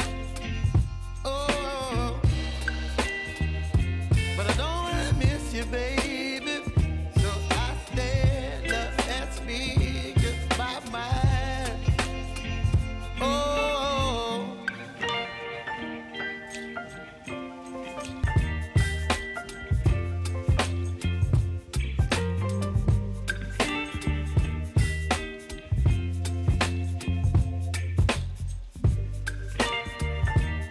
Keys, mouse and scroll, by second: 1.7 click, 4.0 click, 4.3 ctrl+d, 5.6 click, 6.6 Return, 7.6 click, 8.0 ctrl+d, 9.2 click, 11.9 click, 13.0 Return, 14.0 click, 22.9 ctrl+c, 23.9 click, 26.9 ctrl+v, 28.3 space, 30.1 click.